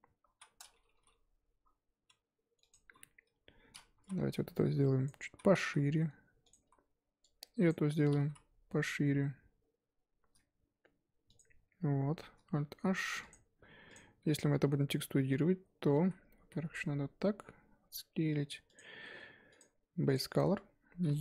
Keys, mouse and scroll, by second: 0.3 ctrl+z, 0.9 ctrl+b, 3.1 KP_1, 4.0 z, 4.2 1, 5.0 click, 5.3 z, 5.6 s, 6.6 z, 7.7 click, 7.9 z, 8.2 s, 11.8 Tab, 12.7 alt+h, 13.3 click, 14.4 z, 14.7 scroll down 1, 15.4 scroll up 2, 15.7 Tab, 16.0 a, 16.4 s, 19.1 Tab, 20.1 click, 20.4 Tab.